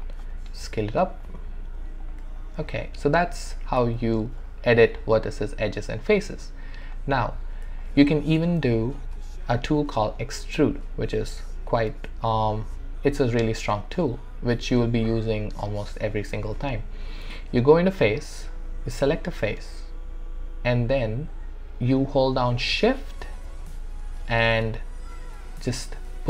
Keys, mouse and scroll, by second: 0.0 alt+right click, 0.3 alt+click, 0.7 r, 1.2 click, 2.8 alt+right click, 4.0 alt+right click, 4.5 alt+middle click, 6.9 click, 8.1-9.3 alt+drag, 9.3 alt+middle click, 11.4 w, 16.5-19.1 right drag, 19.1 click, 24.5-26.2 shift+drag.